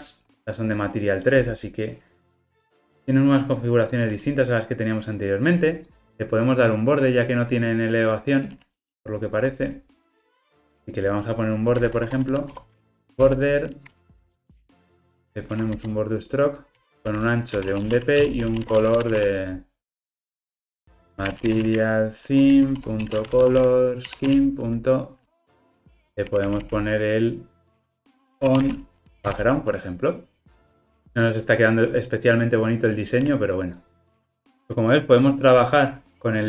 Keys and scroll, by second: 8.9 super+b, 10.6 alt+super+[, 12.0 Tab, 13.9 Return, 16.9 Return, 22.8 Return, 29.3 Return, 33.7 super+b.